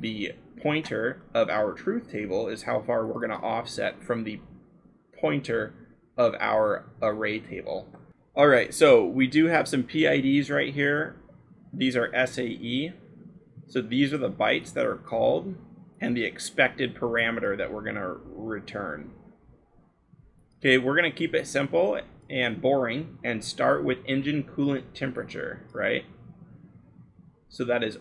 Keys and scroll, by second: 6.3-7.3 scroll.